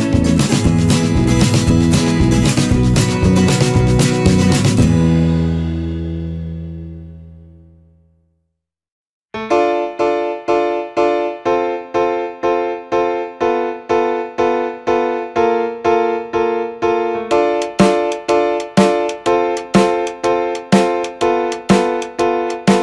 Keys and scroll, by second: 5.8 ctrl+d, 6.6 ctrl+-, 7.3 ctrl+0, 8.5 ctrl+=, 11.4 Return.